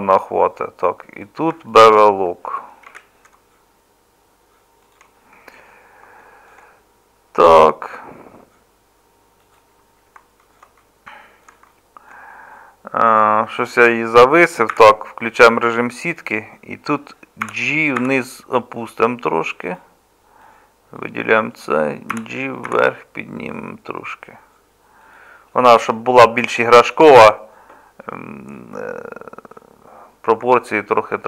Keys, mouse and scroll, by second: 2.9 ctrl+b, 14.7 z, 17.4 g, 22.1 g, 27.1 z.